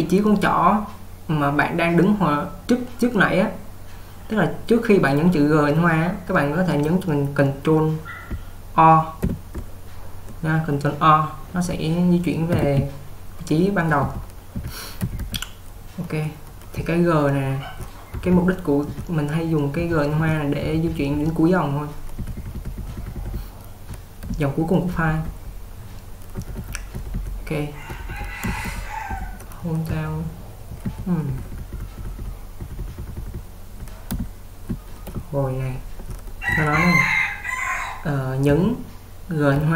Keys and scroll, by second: 14.2-15.2 typing, 16.8-21.2 typing, 22.2-25.3 typing, 26.4-27.2 typing, 28.5-31.8 typing, 33.8 typing.